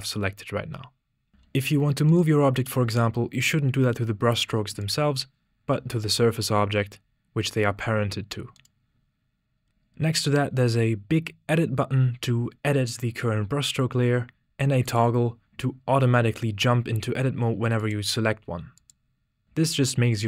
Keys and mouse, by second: 1.3 g, 4.8 click, 5.6 g, 8.8 click, 15.1 click, 18.2 click.